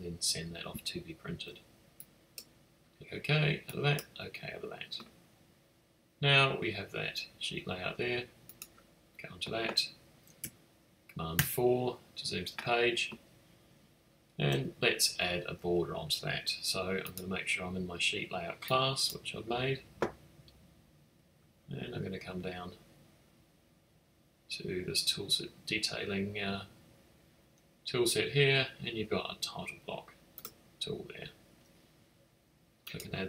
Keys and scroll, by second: 11.3 super+4.